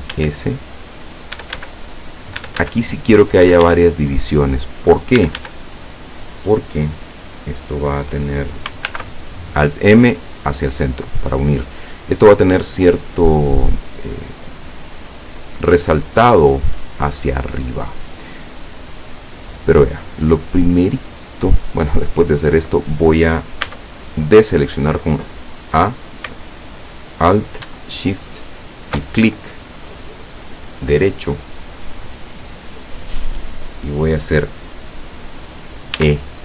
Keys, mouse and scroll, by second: 0.1 s, 1.2 click, 1.4 e, 1.6 s, 2.4 click, 2.5 e, 3.3 click, 3.6 e, 3.8 s, 4.4 click, 5.3 e, 5.5 s, 6.3 click, 8.9 alt+m, 10.5 click, 15.7-17.2 middle drag, 17.9 scroll down 2, 18.6-20.3 middle drag, 21.0-21.8 scroll up 2, 23.7 a, 28.6 alt+shift+right click, 36.0 e.